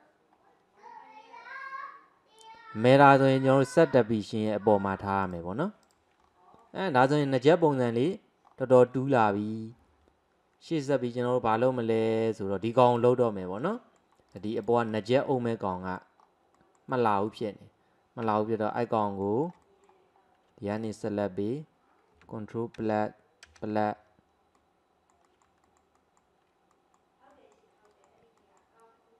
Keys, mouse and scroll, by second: 0.5 scroll down 2, 1.4-1.9 scroll up 1, 1.9-3.7 scroll down 1, 3.7 click, 5.3 click, 5.9 drag, 6.3-6.6 scroll down 2, 6.6 middle click, 7.6-8.0 shift+middle drag, 8.0 scroll down 1, 8.1-8.9 scroll up 4, 8.9-11.3 scroll down 1, 12.4-12.9 middle drag, 12.9 click, 13.3-14.4 middle drag, 14.4 click, 14.6 click, 14.9 click, 15.4-16.2 middle drag, 16.2-16.6 scroll up 2, 16.6-18.3 middle drag, 18.3 Tab, 18.8-20.8 middle drag, 20.8 alt+click, 22.8 KP_Add, 23.5 KP_Add, 24.6-25.7 middle drag, 26.0 alt+middle click, 26.8 alt+middle click, 27.4 alt+middle click, 27.9 alt+middle click, 28.4 alt+middle click.